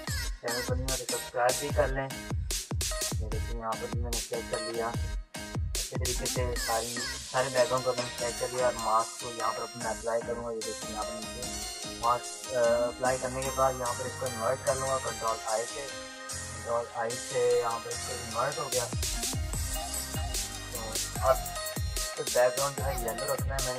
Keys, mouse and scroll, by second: 0.0-2.1 typing, 0.0 click, 0.5 click, 2.3-5.2 drag, 5.3 click, 7.3 typing, 11.2 click, 14.5 ctrl+i, 16.4 z, 18.5 ctrl+i, 19.9 ctrl+d, 20.3 click, 20.4 click, 20.7 ctrl+-, 20.8 ctrl+=, 23.0 click.